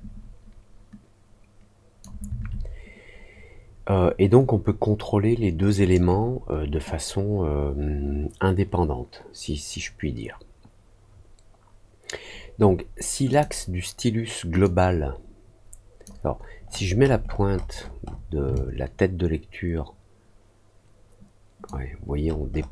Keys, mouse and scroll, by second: 13.2 click, 14.6-16.0 drag, 16.6 middle click, 16.9 middle click, 17.2 middle click, 17.4 middle click, 17.7 middle click, 18.5-21.6 alt+drag, 22.1 alt+middle click, 22.1-22.7 alt+scroll up 3, 22.4 alt+middle click.